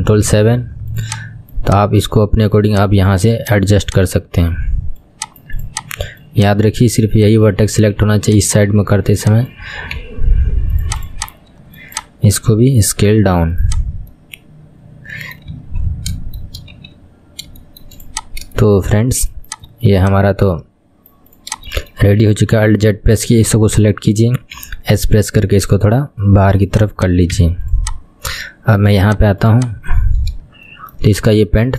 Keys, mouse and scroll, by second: 0.2 ctrl+KP_7, 1.2 click, 1.9 click, 2.7 click, 3.5 click, 5.3 click, 7.2 click, 8.5 click, 9.3 click, 10.1 s, 11.2 click, 12.1 click, 12.9 s, 14.3-15.7 middle drag, 15.7 KP_1, 15.9-16.3 scroll down 2, 16.3 middle click, 16.9 KP_1, 17.2-17.8 scroll down 1, 17.8 shift+middle click, 18.2 click, 18.4-18.7 scroll up 3, 18.7 shift+middle click, 19.7 click, 20.1 click, 21.9 shift+middle click, 22.8 alt+z, 24.0 click, 24.7 s, 27.1 click, 27.5 Tab, 27.9 click, 29.1 click, 29.8-30.6 scroll down 2, 30.6 scroll down 3, 30.8 shift+middle click, 31.3-31.7 scroll up 5.